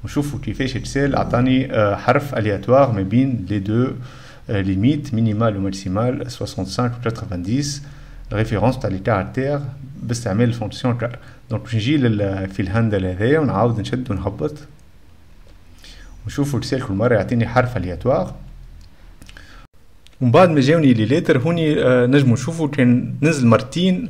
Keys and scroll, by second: 7.4-8.2 typing, 19.6 6.